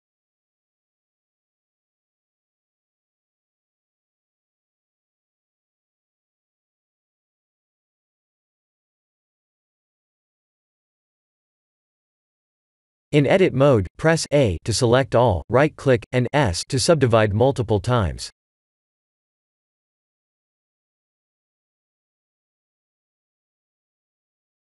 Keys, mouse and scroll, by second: 2.9 s, 4.7 KP_1, 4.9 KP_1, 5.7-6.3 scroll up 5, 6.5 g, 9.2 s, 10.3 g, 13.7-14.2 scroll up 3, 14.7 shift+middle click, 16.1 click, 16.7 Tab, 17.3 right click, 17.9 right click, 19.0 right click, 22.8 3, 23.3 click.